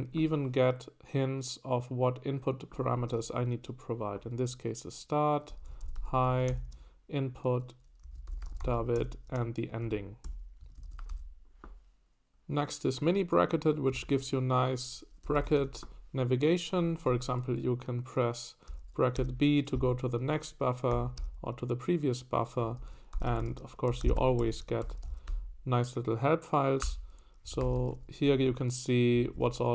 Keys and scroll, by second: 5.2-11.7 typing, 10.6 Escape, 15.0-16.0 typing, 17.1 Escape, 17.1 typing, 18.4-19.7 typing, 20.9-25.3 typing, 26.8 Return, 27.6 ctrl+d, 27.7 ctrl+d, 27.9 ctrl+d, 28.2 ctrl+d, 29.1-29.7 typing.